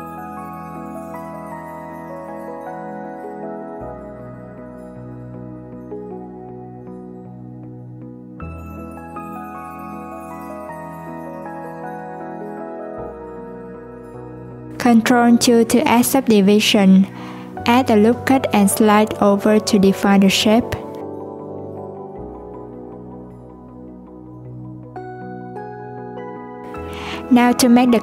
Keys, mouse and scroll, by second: 1.6 click, 3.9-4.3 scroll down 2, 4.3-5.5 scroll up 1, 5.5 click, 6.5 click, 10.1-10.4 scroll down 1, 10.4-11.3 scroll up 2, 11.3-12.3 drag, 12.3 scroll down 1, 12.8-13.3 scroll up 1, 13.3 Tab, 14.3 alt+z, 15.3 ctrl+2, 16.3 Tab, 17.5 ctrl+r, 21.2 Tab, 22.2 right click, 25.0-25.7 scroll down 1, 25.7-28.0 scroll down 1.